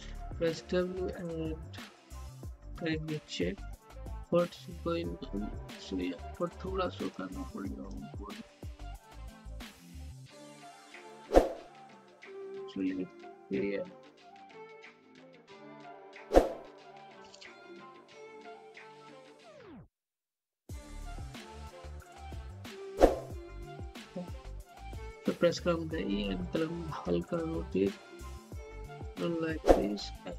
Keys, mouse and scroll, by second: 0.3 w, 1.0-2.7 drag, 2.7 z, 3.8-5.7 typing, 6.7 click, 9.2-11.1 typing, 11.8 click, 12.8-15.0 typing, 15.8 click, 16.5-20.1 typing, 20.4-22.7 drag, 22.7-25.2 typing, 25.8 click, 27.3 z, 27.8-29.2 drag, 29.2 w, 30.1-30.3 drag.